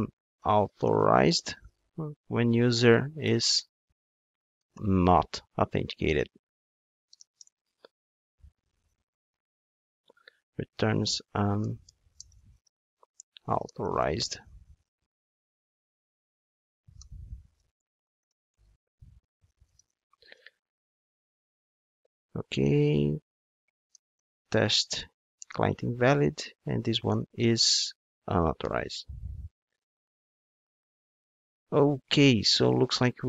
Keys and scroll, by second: 1.5 super+v, 25.4 Return.